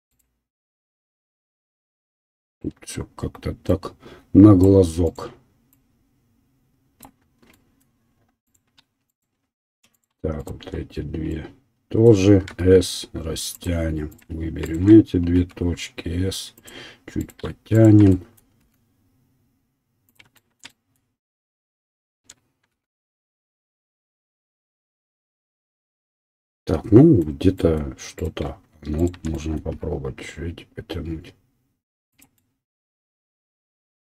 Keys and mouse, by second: 0.1 right click, 2.5 right click, 8.4 click, 8.4 right click, 9.1 shift+click, 9.1 shift+right click, 9.6-13.7 shift+drag, 10.4 shift+right click, 12.6 s, 13.7 middle click, 14.1 click, 14.3 shift+middle click, 14.7 shift+click, 14.9-17.2 middle drag, 15.3 s, 17.2 right click, 17.3 shift+middle click, 17.7 click, 17.8-22.0 middle drag, 18.6 s, 22.0 shift+click, 22.1 shift+middle click, 22.8 s, 25.2-28.2 middle drag, 28.2 click, 28.3 shift+middle click, 29.0 shift+click, 29.1-34.0 shift+middle drag, 29.7 s.